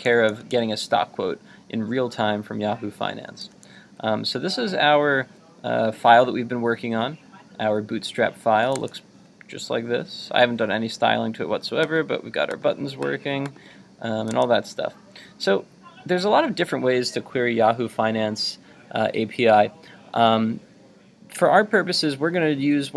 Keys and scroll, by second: 3.3 super+Tab, 8.7 super+Tab, 14.3 super+Tab.